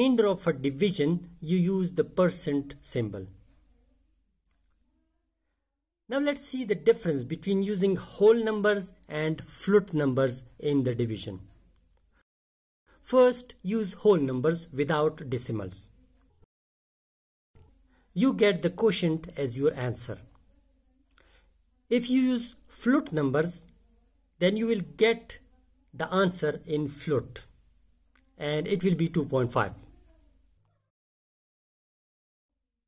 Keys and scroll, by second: 0.2 shift+5, 0.9 2, 3.1 Return, 12.3 5, 15.1 5, 17.0 /, 18.1 2, 18.6 Return, 20.7 5, 21.3 ., 22.3 0, 23.6 /, 24.8-26.1 typing, 27.2 Return.